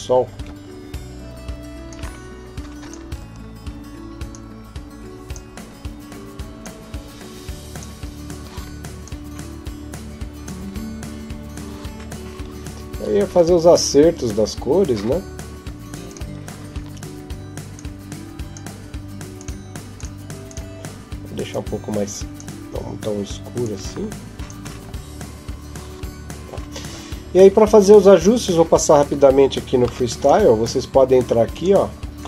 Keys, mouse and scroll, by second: 1.7 click, 15.4 Escape, 15.9 right click, 17.6 click, 19.2 click, 28.7 Escape, 29.6 ctrl+s, 31.4 click.